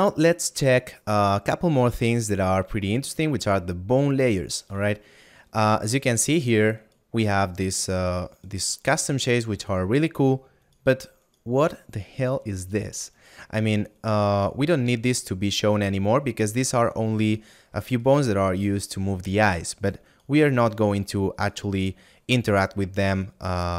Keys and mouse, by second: 5.5 shift+middle click, 8.7 right click, 12.1 middle click, 13.6 right click.